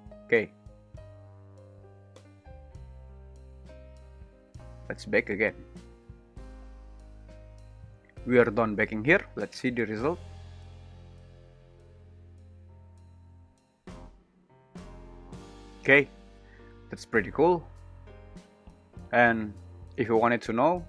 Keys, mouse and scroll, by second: 7.8-18.4 drag, 9.5 shift+l, 9.9 space, 16.5 space.